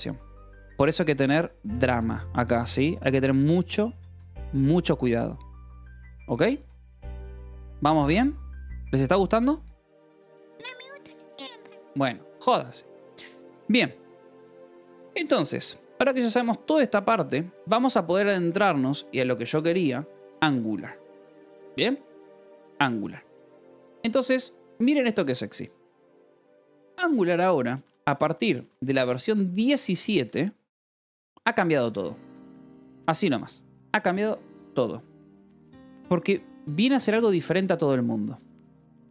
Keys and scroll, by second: 2.6 :, 3.2 =, 5.2 j, 5.6 k, 9.4 Return, 11.4 :, 11.8 j, 13.0 Return, 13.5-15.2 typing, 22.6 alt+Tab, 23.2 Escape, 23.5 j, 23.9 o, 24.2 Return, 26.7-29.3 typing, 30.0 Escape.